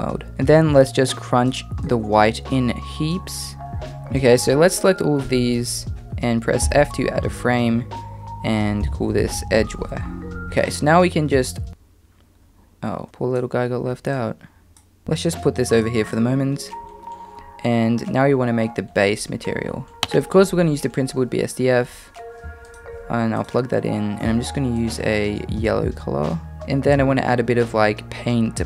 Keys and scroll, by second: 6.6 f.